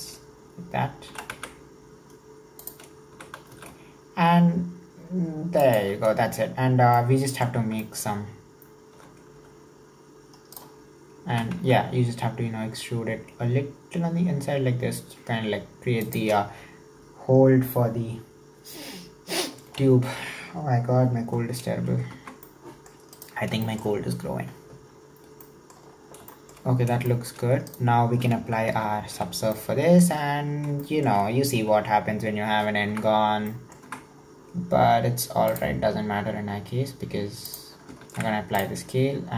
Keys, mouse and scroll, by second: 0.5-1.1 scroll up 1, 1.1 s, 6.2 scroll down 1, 7.0 middle click, 7.8 scroll down 1, 7.9 shift+middle click, 8.1-9.0 scroll up 2, 9.0 e, 19.9-21.4 scroll down 3, 21.4-22.1 scroll down 3, 22.1 Tab, 22.5-23.2 middle drag, 23.2 right click, 23.6-25.0 shift+middle drag, 25.0-25.5 scroll down 2, 25.5 middle click, 25.9-26.3 scroll up 3, 26.3 shift+middle click, 26.6-27.2 scroll up 1, 27.2-27.7 shift+middle drag, 27.7 right click, 28.9 ctrl+3, 29.5-31.3 middle drag, 31.3-32.2 scroll up 1, 33.0 Tab, 33.3 scroll down 1, 33.5-34.0 middle drag, 34.0 Tab, 34.2-35.5 scroll up 1, 35.5 drag, 37.4 click, 38.0 ctrl+a.